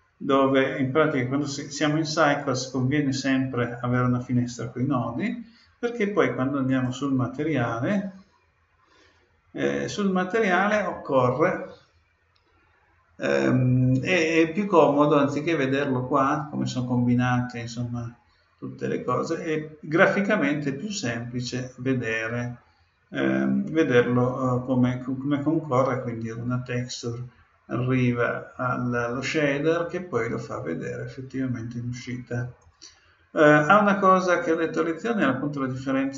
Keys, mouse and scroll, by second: 6.7-8.4 right drag, 9.6-11.4 drag, 32.6-34.3 drag, 34.5-36.1 drag.